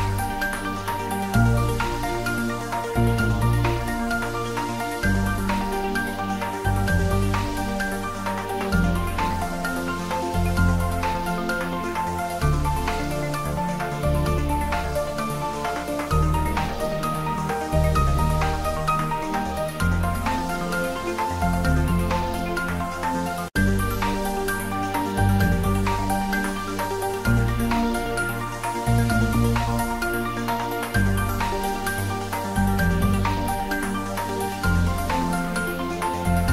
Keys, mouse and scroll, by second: 0.9 shift+Tab, 1.7-2.8 typing, 5.7 shift+click, 6.5-7.3 typing, 10.4-12.7 shift+drag, 12.5-13.5 typing, 14.2 shift+Right, 15.0 shift+click, 16.2-17.1 typing, 18.2 shift+click, 20.4 shift+click, 21.0-21.8 typing, 21.9 shift+Right, 23.1 shift+click, 23.7 shift+Tab, 25.2 shift+Tab, 25.8 shift+click, 26.4-28.7 typing, 30.4 shift+click, 31.3-32.3 typing.